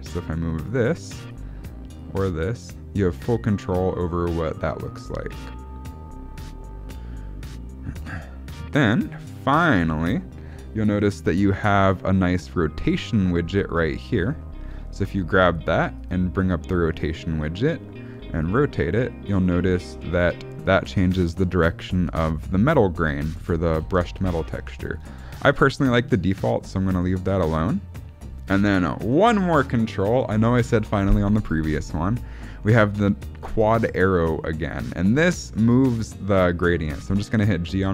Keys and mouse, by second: 1.9-9.1 drag, 11.4-11.8 shift+middle drag, 13.9 click, 14.3-14.7 shift+middle drag, 18.4-19.2 drag, 20.1 shift+middle click, 21.4-23.5 drag, 23.7 ctrl+z, 24.5 ctrl+z, 25.4 shift+middle drag, 27.1-27.9 shift+middle drag, 32.9 click, 34.5 click, 37.0 g.